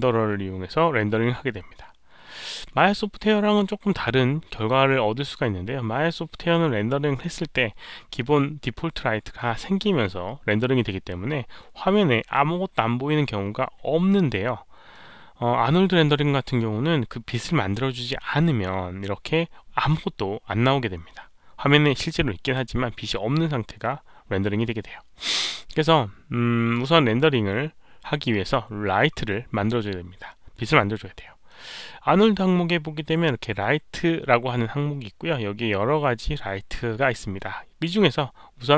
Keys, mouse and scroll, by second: 14.9-15.9 drag, 25.8 click, 31.4 click.